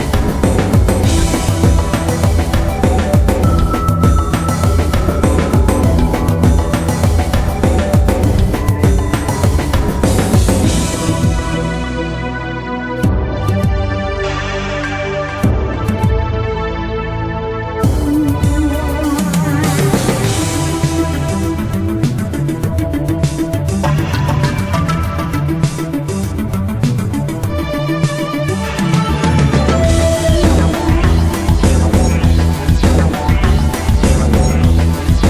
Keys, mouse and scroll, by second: 0.4 shift+right click, 0.7 middle click, 1.8 middle click, 2.2 shift+middle click, 3.1 shift+right click, 3.8 middle click, 4.9 shift+right click, 5.4 middle click, 6.2 ctrl+b, 9.3-9.7 scroll down 1, 9.7 right click, 10.0 scroll down 1, 10.2 middle click, 11.2 ctrl+b, 13.7 click, 14.1 middle click, 14.3 middle click, 14.4 scroll up 1, 14.8 middle click, 16.6 click, 17.0 middle click, 18.7 click, 19.8 middle click, 20.2 shift+middle click, 20.8 right click, 21.6-23.3 drag, 23.3 right click, 23.9 right click, 24.4-25.4 drag, 25.4 middle click, 25.7 scroll up 1, 26.6 shift+right click, 28.0 alt+m, 29.6 click, 30.0 scroll down 1, 30.3 middle click, 31.3-31.7 scroll up 1, 31.9 middle click, 32.5 right click, 33.1-34.5 drag, 34.9 right click.